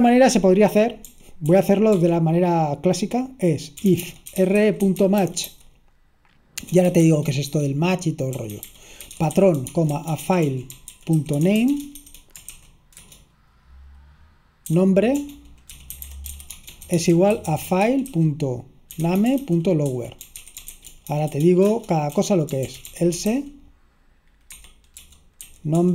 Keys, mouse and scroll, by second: 0.1 k, 1.3-2.1 typing, 3.8-13.3 typing, 14.5-22.2 typing, 23.6-25.0 typing.